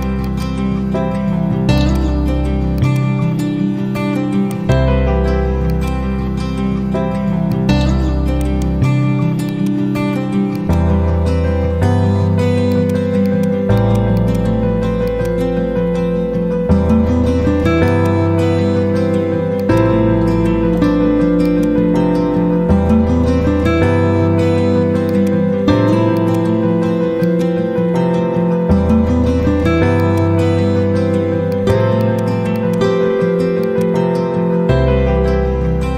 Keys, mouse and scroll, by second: 1.0 F4, 1.7 click, 4.4 right click, 5.6 click, 8.3 ctrl+right click, 9.4 click, 10.4 shift+click, 11.1-11.9 typing, 12.6-17.2 drag, 30.6 b, 31.4 click.